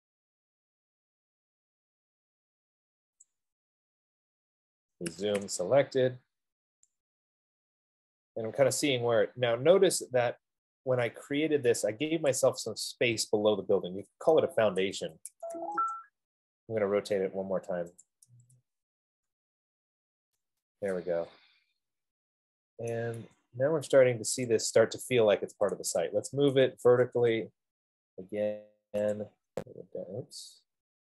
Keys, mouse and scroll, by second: 3.7 click, 4.3 middle click, 5.3-7.6 typing, 6.7 middle click, 10.2-10.9 typing, 11.9 right click, 12.8-16.2 right drag, 15.2-16.2 typing, 16.1 Return, 18.4 click, 18.5-19.7 typing, 21.8-22.6 typing, 23.1 right click, 23.5 Escape, 24.7 click, 25.8-29.4 typing, 29.9 click.